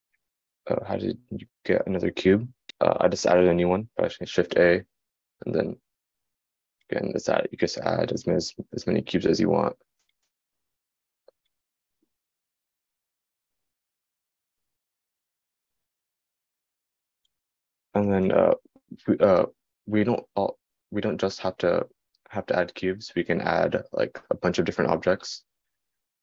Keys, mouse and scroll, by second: 6.1-12.5 right drag, 12.5-15.8 drag.